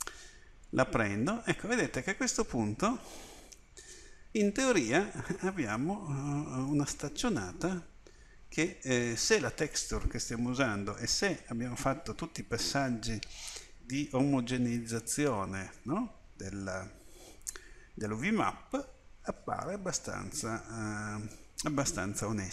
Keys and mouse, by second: 3.0-8.5 middle drag, 9.3 middle click, 9.7 middle click, 10.1-12.2 middle drag, 13.8-14.9 middle drag, 15.4 middle click, 17.0 middle click.